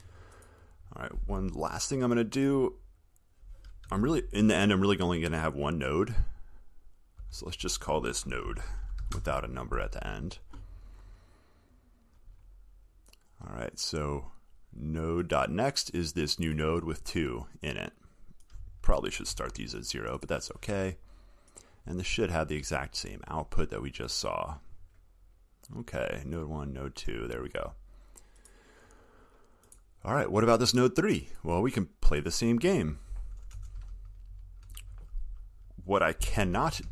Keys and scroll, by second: 7.5 ctrl+r.